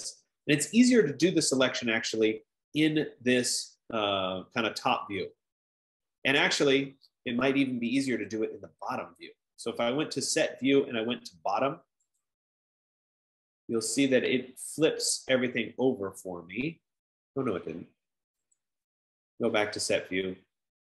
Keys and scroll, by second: 9.5 F15.